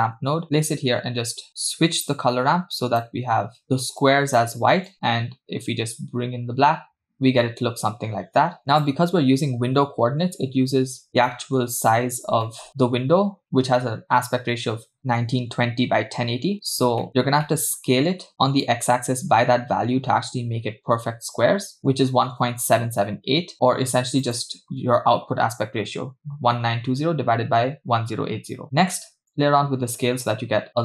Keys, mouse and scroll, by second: 1.5 click, 2.0-3.0 drag, 4.0 click, 4.9-8.9 drag, 11.1 scroll down 2, 11.2-11.6 shift+middle drag, 11.6-12.5 scroll up 2, 12.5 shift+middle click, 17.0 middle click, 17.1 scroll up 4, 17.5 middle click, 18.6-21.8 shift+drag, 23.5 click, 24.2 click, 25.0-26.9 scroll up 2, 28.6 middle click, 29.3-30.8 drag.